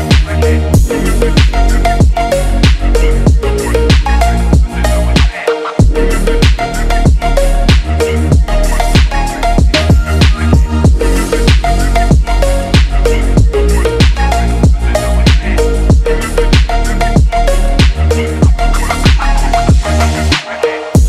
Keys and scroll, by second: 2.3 ctrl+=, 4.5 ctrl+=, 9.9 ctrl+-, 13.9 ctrl+-.